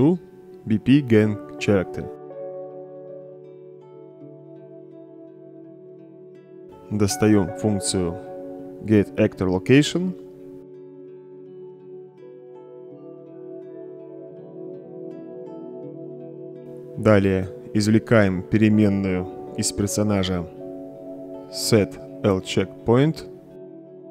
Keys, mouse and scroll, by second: 0.0-1.4 typing, 2.2 Return, 3.0-4.1 drag, 4.9-5.6 right drag, 7.5 right click, 9.5-13.2 typing, 14.4-16.3 drag, 18.6-20.1 drag, 21.8-23.7 typing.